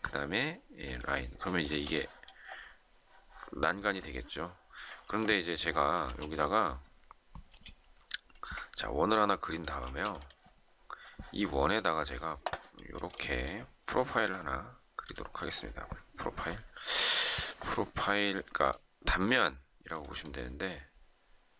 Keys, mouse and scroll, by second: 1.6 shift+middle click, 5.0 ctrl+z, 6.0 space, 7.4 s, 9.5 ctrl+click, 9.8 space, 12.7 shift+middle click.